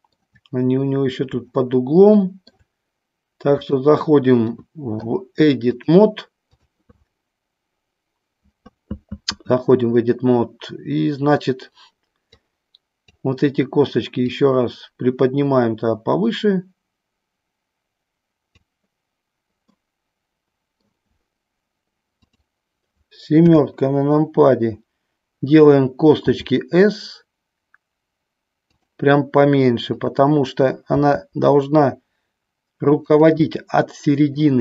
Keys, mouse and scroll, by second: 1.8 shift+middle click, 5.8 click, 12.6 click, 14.6-18.7 drag, 19.8-20.9 middle drag, 22.3 click, 23.5 KP_7, 26.4 s, 28.9 click, 30.2 click, 33.3 click, 33.6-34.6 middle drag.